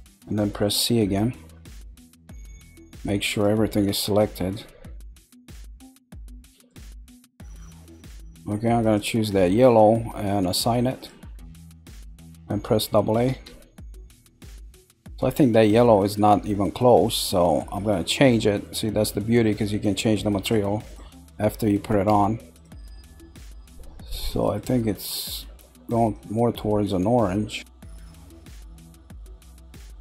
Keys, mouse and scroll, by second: 0.7 c, 3.8 middle click, 4.8-5.6 scroll up 1, 5.6-8.8 middle drag, 8.8 click, 10.9 click, 11.7 scroll down 2, 13.1 a, 13.8 scroll down 3, 14.3-15.5 middle drag, 15.5 scroll up 1, 16.1-19.1 middle drag, 20.4 click, 20.8 click, 22.5 click, 24.2 click.